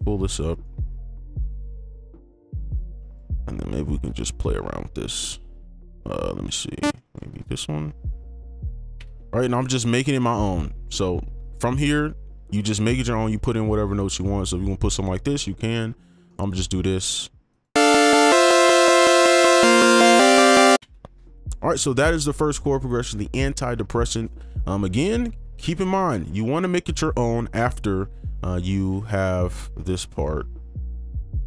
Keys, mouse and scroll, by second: 0.3 right click, 2.0 ctrl+click, 7.0 ctrl+click, 7.3 ctrl+Up, 8.9 ctrl+b, 9.6 right click, 13.2 right click, 13.7 ctrl+click, 19.1 space, 20.8 space, 26.0 right click, 28.9 ctrl+2, 29.3 ctrl+click, 30.5 Delete.